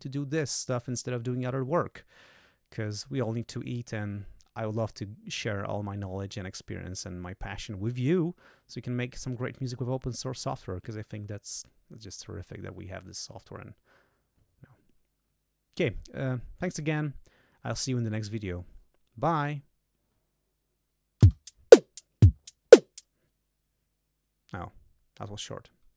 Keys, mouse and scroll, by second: 21.2 space.